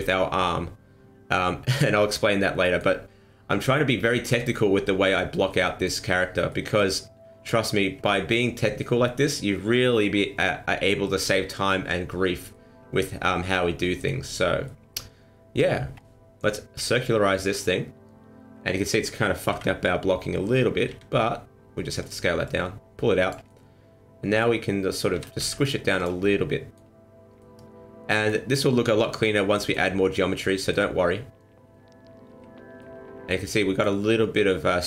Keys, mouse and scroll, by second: 0.4 middle click, 2.2 middle click, 4.7 scroll down 2, 4.8 middle click, 5.4 middle click, 6.5 middle click, 12.5 middle click, 14.4 scroll up 3, 14.6 middle click, 15.9-16.3 scroll down 1, 16.9 click, 17.6 middle click, 19.5 KP_1, 20.9 s, 22.4 click, 23.4 middle click, 25.1 s, 26.2 middle click, 27.4 middle click, 29.5 middle click, 30.1 middle click, 31.6 t, 32.3 t, 32.8 middle click, 33.6 middle click.